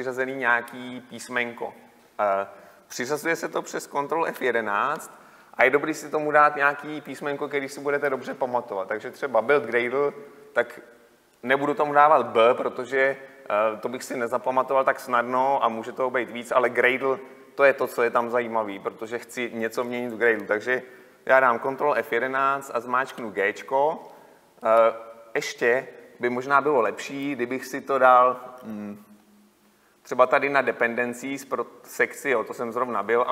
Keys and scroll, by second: 4.5 ctrl+F11, 28.8 F11.